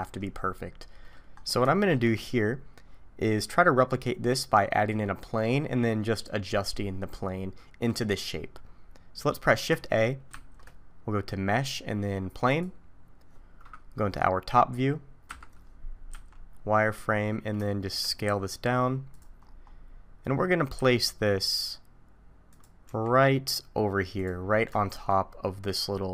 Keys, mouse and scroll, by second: 1.0 middle click, 1.3-1.6 scroll up 1, 1.7 shift+middle click, 2.1-2.9 scroll up 4, 9.2 middle click, 10.3 shift+a, 13.0-13.6 scroll down 4, 15.2 KP_7, 16.1 z, 16.5-17.6 scroll down 1, 17.6 scroll down 2, 17.7 shift+middle click, 18.3 s, 19.4-20.7 scroll up 7, 20.7 scroll up 1, 20.8 s, 22.9 g, 24.4 scroll up 2, 24.8 shift+middle click.